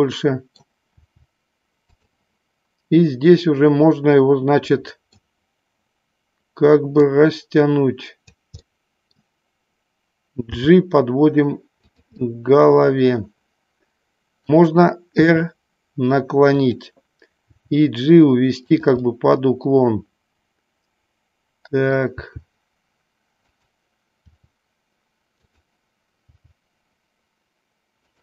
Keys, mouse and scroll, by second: 1.0 r, 2.0 click, 4.9 middle click, 7.1-8.4 drag, 8.6-9.4 middle drag, 10.5 g, 11.9 click, 12.4-14.7 middle drag, 15.2 r, 16.7 click, 17.6 g, 18.8 click, 19.1-22.0 middle drag, 22.4 g, 23.6 click, 24.4 r, 26.4 g.